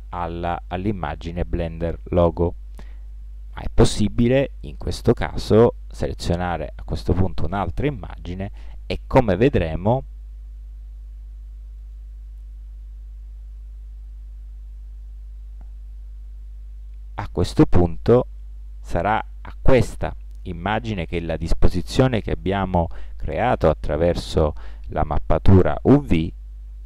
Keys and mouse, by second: 3.6-5.4 drag, 10.7-11.7 drag, 18.4-25.6 middle drag.